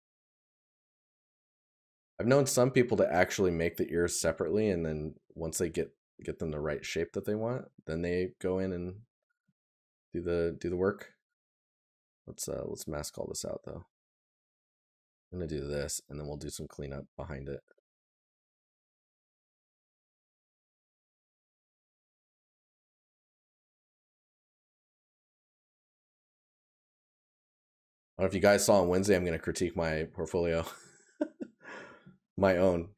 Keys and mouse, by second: 5.1 right click, 7.7 right click, 15.5 right click, 22.9 right click, 27.0 right click, 30.8 right click.